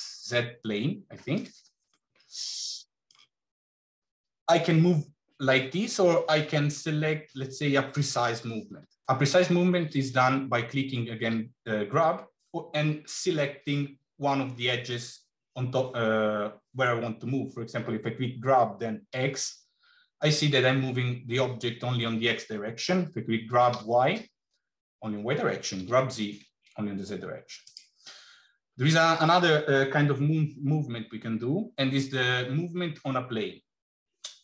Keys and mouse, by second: 1.7-3.0 middle drag, 11.1 g.